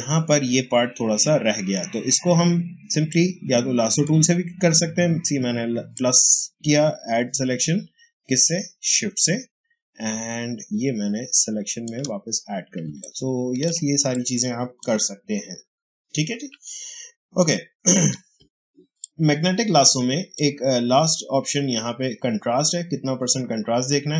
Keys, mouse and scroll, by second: 3.0-5.8 drag, 5.8-12.8 shift+drag, 12.8 ctrl+space, 12.9 ctrl+click, 12.9 ctrl+click, 13.3 ctrl+space, 14.0 click, 14.1 space, 18.9-22.8 drag.